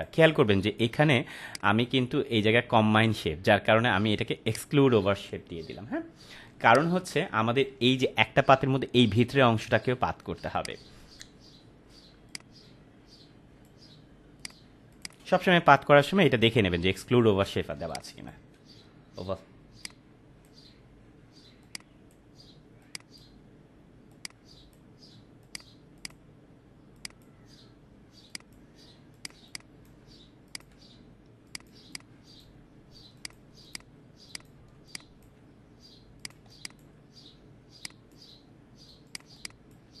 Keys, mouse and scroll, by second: 4.4 click, 6.5 space, 6.6-7.8 click, 10.4 space, 10.5-11.1 click, 10.8 space, 12.2-13.8 drag, 15.1 space, 17.6 space, 17.9 click, 18.2 space, 19.8-20.4 drag, 29.3 space, 29.4-30.0 click, 29.8 space, 30.4 click, 31.7 space, 31.9 click, 32.2 space, 33.2 click, 34.7 space, 34.8-35.5 click, 35.2 space, 36.2 click, 36.3 space, 36.4 click, 36.8 space, 37.8 click, 39.2 space, 39.3-40.0 click, 39.7 space.